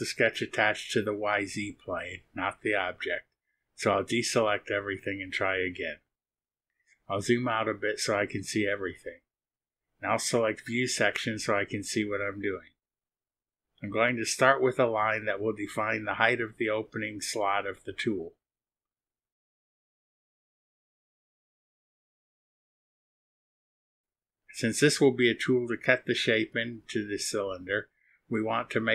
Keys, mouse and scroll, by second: 0.3 click, 2.4 click, 4.6 click, 5.5 click, 6.7-7.0 scroll down 1, 7.4 click, 10.0 click, 13.6 click, 18.9 click, 22.1 click, 27.4 click, 28.4 click.